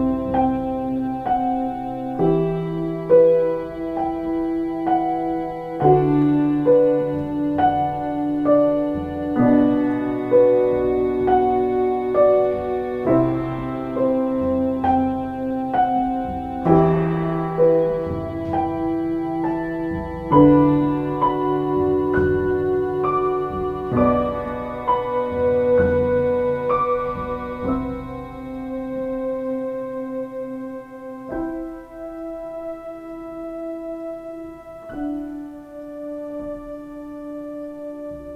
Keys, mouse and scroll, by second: 14.2 ctrl+z, 33.6 ctrl+space.